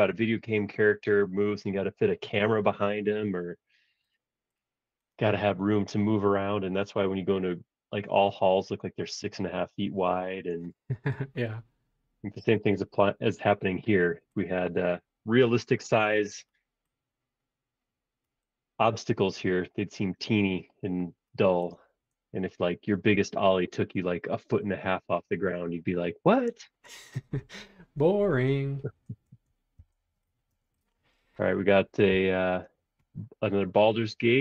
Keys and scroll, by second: 29.8 Return, 30.5 space, 32.2 p.